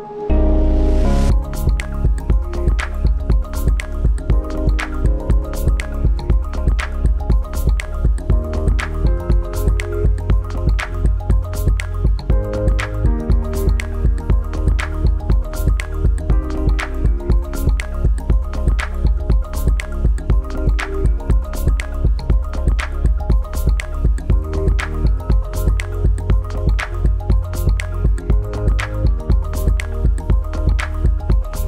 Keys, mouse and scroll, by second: 9.0 click, 11.9 click, 20.3 click, 25.0 click, 29.7 click.